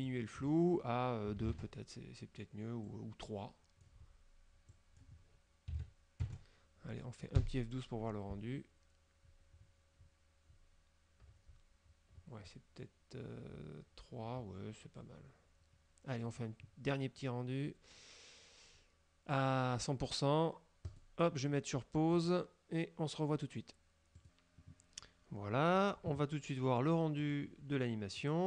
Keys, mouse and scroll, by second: 1.3 KP_2, 1.4 KP_Enter, 3.0-4.1 drag, 4.8 click, 5.8 KP_3, 6.3 KP_Enter, 7.5 F12, 9.4-10.8 scroll down 8, 12.2-12.7 scroll up 4, 14.5 scroll up 2, 21.0 click, 22.2 click, 24.2 click, 27.3 click, 28.2 click.